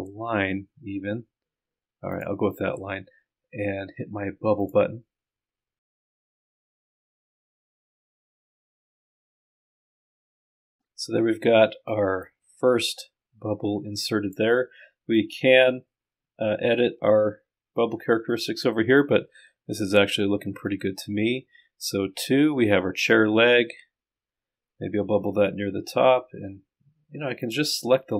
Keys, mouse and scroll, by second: 2.1 click, 4.6 click, 6.8 click, 9.0 click, 10.0 click, 10.7 click, 12.2-14.5 drag, 18.9-20.4 scroll down 2, 27.4 click.